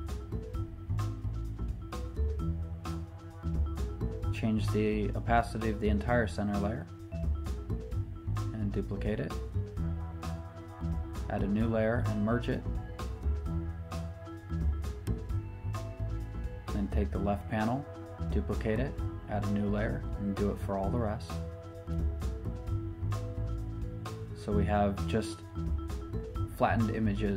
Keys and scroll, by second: 10.6 shift+super+n, 10.7 Return, 18.9 shift+super+n, 19.0 Return, 21.2 Return, 23.8 Escape.